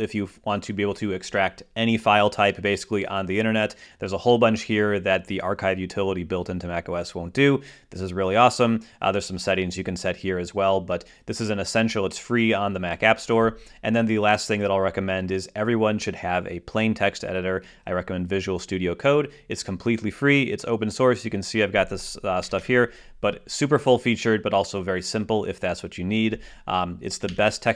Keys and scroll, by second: 22.5 Return, 27.3 super+q.